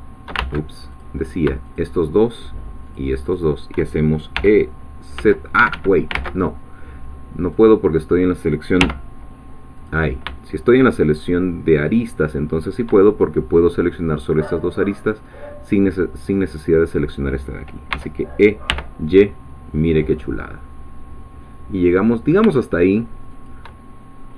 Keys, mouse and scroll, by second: 0.4 ctrl+shift+z, 0.9 ctrl+shift+click, 1.8-3.1 shift+drag, 3.3 shift+click, 4.3 e, 5.2 z, 5.6 Escape, 6.2 ctrl+z, 7.6-8.8 drag, 8.8 2, 9.8 click, 11.7 shift+click, 17.9 e, 18.7 y, 23.3 shift+click.